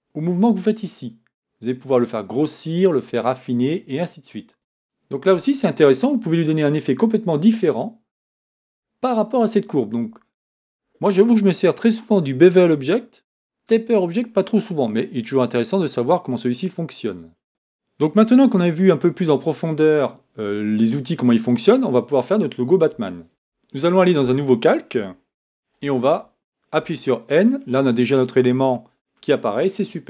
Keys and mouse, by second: 3.7 right click, 6.2-17.5 drag, 26.8 n.